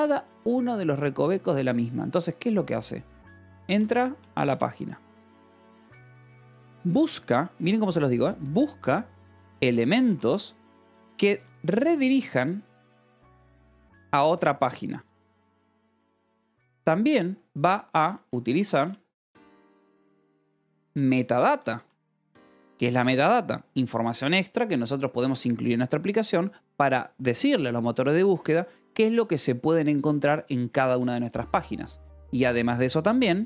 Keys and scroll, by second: 2.9-16.6 typing, 17.8-22.5 typing, 22.9 Escape, 31.8 :, 32.0 space.